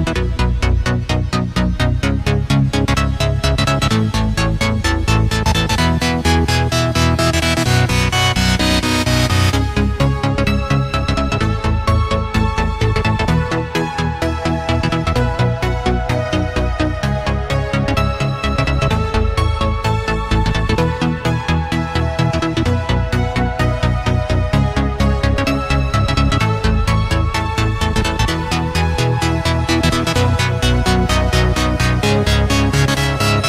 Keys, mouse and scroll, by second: 0.0-0.9 typing, 1.8-4.2 drag, 4.2 right click, 6.2-9.0 drag, 10.1 Up, 10.6-11.0 typing, 11.4 Return, 12.5-14.8 drag, 14.8 right click, 15.3 click, 15.8-17.2 typing, 18.7 Return, 19.6 click, 22.3-23.7 typing, 24.5-26.8 drag, 26.8 F10, 27.5 click, 29.5 F11, 29.5 F10, 30.3 click.